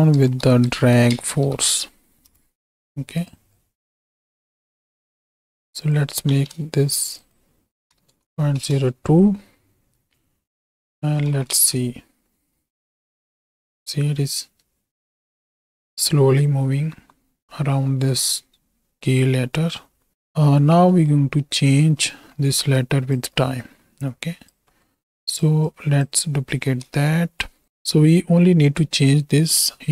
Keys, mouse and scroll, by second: 3.6-5.6 drag, 5.8 click, 6.3 KP_0, 7.2-8.6 drag, 8.1 KP_0, 11.2 shift+Right, 11.3 shift+Left, 11.5 space, 20.1 space, 20.9 middle click, 22.4-23.6 middle drag, 23.6 click, 24.8 middle click, 25.7 click, 26.6 shift+d, 27.8 click, 29.6 middle click.